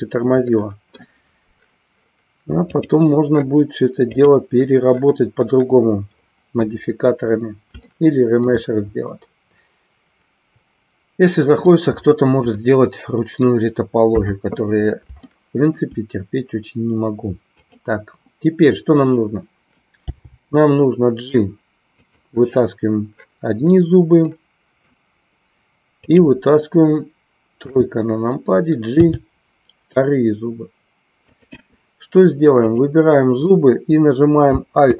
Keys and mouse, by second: 0.6 middle click, 2.8 click, 7.8 shift+middle click, 9.2-11.8 middle drag, 12.7 middle click, 14.2 KP_3, 15.3 shift+middle click, 17.6 click, 22.1 click, 24.3 middle click, 25.9 click, 27.6 KP_3, 28.9 g.